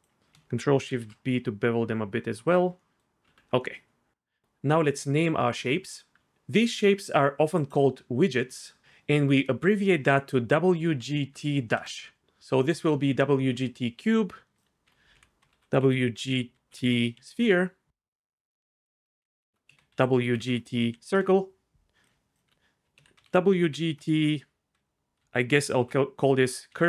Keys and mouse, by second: 0.9 ctrl+shift+b, 2.4 click, 3.2 Tab, 3.6 middle click, 7.5 click, 14.8 F2, 19.0 F2, 19.7 BackSpace, 22.4 F2.